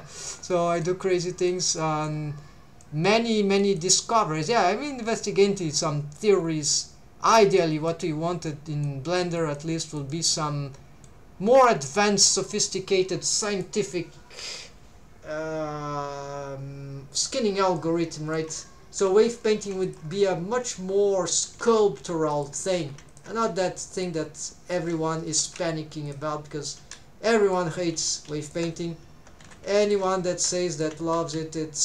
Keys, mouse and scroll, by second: 0.5 middle click, 1.0 middle click, 1.8 middle click, 2.4 scroll down 1, 2.8 middle click, 3.6 middle click, 4.2 middle click, 4.9 click, 6.4 scroll down 2, 6.7 middle click, 7.6 middle click, 8.2 scroll up 1, 8.6 middle click, 9.2 middle click, 9.5 middle click, 10.1-11.1 middle drag, 17.8 middle click, 19.0 3, 19.5 alt+a, 19.8 alt+shift+click, 20.7 click, 21.6 g, 22.3 shift+click, 22.8 alt+a, 23.1 alt+shift+click, 23.8 right click, 23.8 click, 25.4 g, 26.1 shift+click, 26.8 s, 27.4 shift+click, 28.2 alt+a, 28.4 alt+shift+click, 29.5 2, 29.8 alt+shift+click, 30.4 alt+a, 30.7 alt+shift+click, 31.2 s.